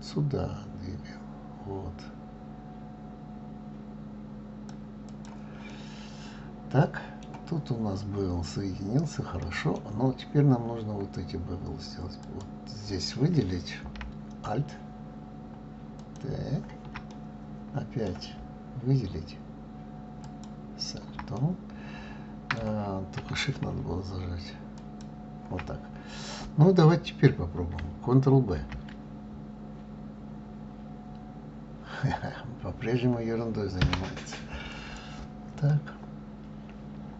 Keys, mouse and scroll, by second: 5.7-8.7 middle drag, 9.4 middle click, 10.0 scroll down 3, 10.8-12.0 scroll up 3, 12.2 click, 16.0 alt+click, 17.1-20.1 middle drag, 20.2 alt+click, 21.4-24.4 middle drag, 24.8 alt+shift+click, 26.0-27.1 scroll down 2, 27.1-28.0 scroll up 1, 28.6 ctrl+b, 34.7 click, 35.7-37.1 middle drag.